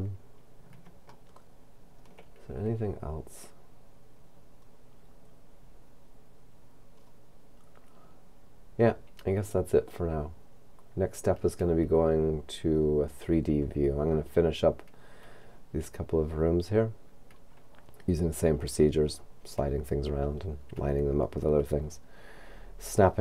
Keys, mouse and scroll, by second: 1.3 shift+middle click, 7.1-8.9 scroll down 3.